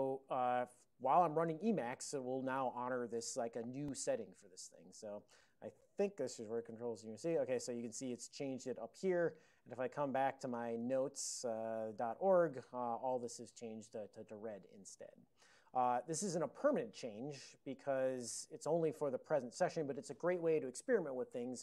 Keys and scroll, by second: 5.5 ctrl+a, 6.2 ctrl+c, 6.7 ctrl+c, 7.7 ctrl+p, 8.2 ctrl+p, 9.7 ctrl+x, 10.7-11.9 typing, 12.0 Return, 12.7 ctrl+a, 13.6 ctrl+n.